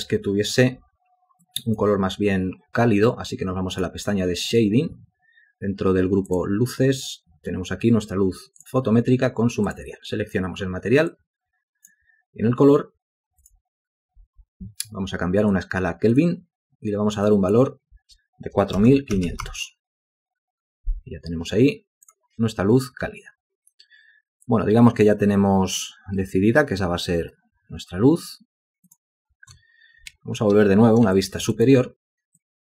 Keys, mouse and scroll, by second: 18.7-19.9 typing, 30.3 ctrl+space, 31.3 ctrl+alt+click, 31.7 shift+click.